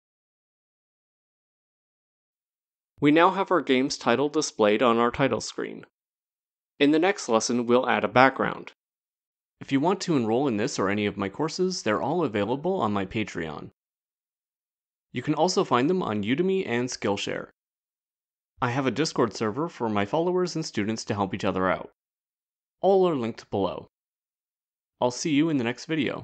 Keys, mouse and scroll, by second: 1.6 click, 4.8 click, 6.8 click.